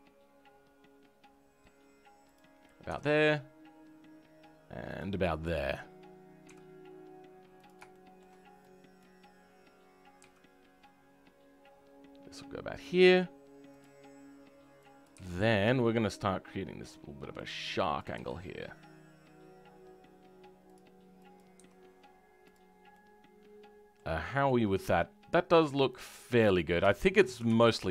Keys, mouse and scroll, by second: 5.7 click, 6.5 g, 7.8-8.9 shift+middle drag, 8.9 click, 10.1 g, 17.9 click, 18.1 g, 21.3 click, 21.5 g, 22.6 scroll down 3, 22.9 middle click, 23.5 middle click, 24.1-24.4 scroll up 5, 24.4 middle click, 25.6 middle click, 26.6 scroll down 2, 26.8-27.9 shift+middle drag.